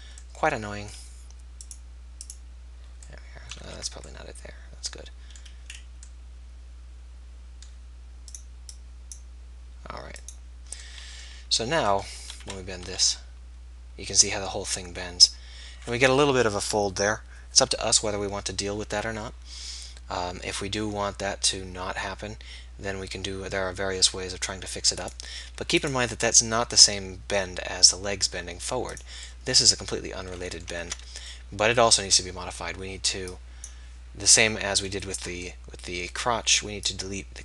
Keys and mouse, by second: 1.7-3.7 drag, 3.7 ctrl+z, 5.8-13.9 drag, 12.4 KP_3, 12.8 r, 15.6-26.2 middle drag, 26.2 click, 26.2 r, 27.0-28.1 drag, 28.5 middle click, 29.5 click, 30.9 ctrl+z, 30.9-33.1 drag, 34.1-37.4 drag.